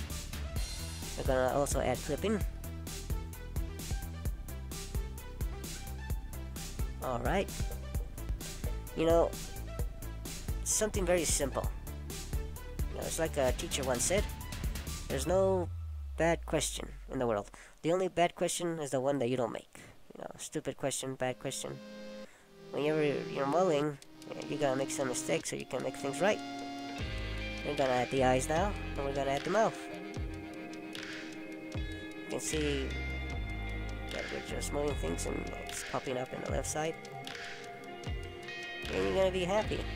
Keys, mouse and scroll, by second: 1.4 click, 14.1 scroll down 1, 14.2 middle click, 19.0 a, 19.6 a, 22.3 click, 24.4 scroll up 2, 26.1 click, 30.3 click, 32.5 click, 35.1 click, 37.8 middle click, 38.8 a, 39.1 a, 39.6 scroll down 2.